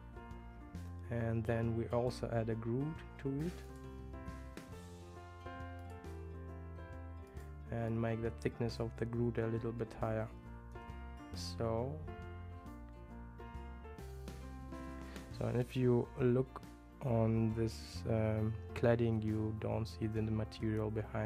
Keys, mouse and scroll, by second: 3.7 click, 5.8-12.1 drag.